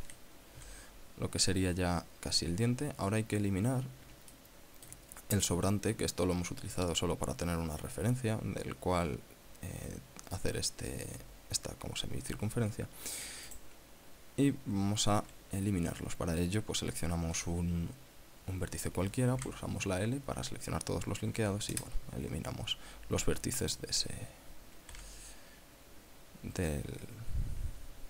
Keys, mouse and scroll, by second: 0.9 KP_7, 4.7 shift+middle click, 13.9 right click, 19.7 l, 21.8 x, 22.1 KP_Enter, 24.0 right click, 25.3 l.